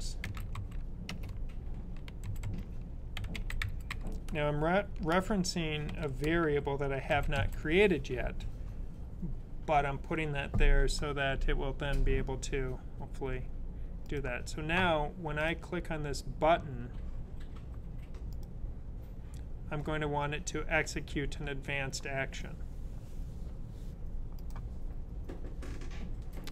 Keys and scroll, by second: 0.0-0.9 typing, 2.9-5.8 typing, 7.2 typing.